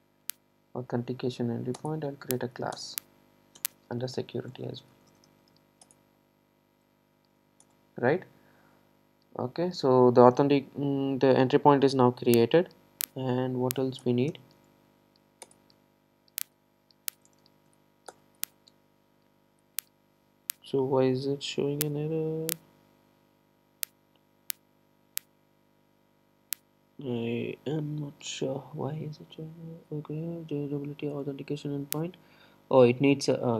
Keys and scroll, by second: 1.9 alt+Return, 7.4 super+e, 15.5 Return.